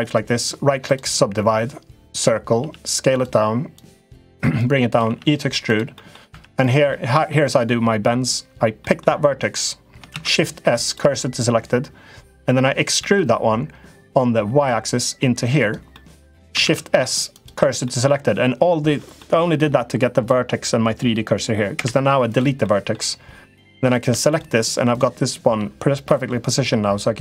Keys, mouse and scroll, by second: 2.3 s, 3.7 click, 4.4 click, 4.8 e, 5.8 middle click, 6.1 1, 6.4 click, 6.6 middle click, 8.5 middle click, 9.8 shift+s, 12.8 e, 15.8 middle click, 16.4 shift+s, 17.6 middle click, 18.9 middle click, 21.5 Delete, 22.4 middle click, 23.5 3, 23.7 click, 24.4 shift+click, 24.7 click, 25.8 middle click.